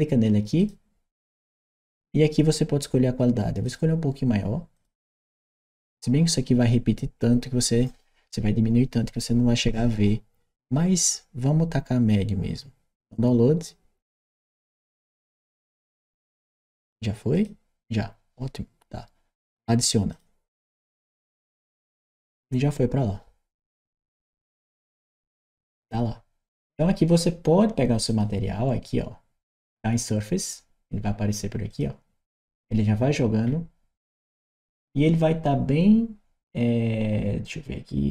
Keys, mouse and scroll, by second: 0.4 click, 3.5 click, 4.6 click, 14.1 click, 17.1 click, 19.9 click, 24.3 click, 27.9 click, 31.5 click, 32.5 scroll down 1, 33.3 scroll down 1, 38.0 click.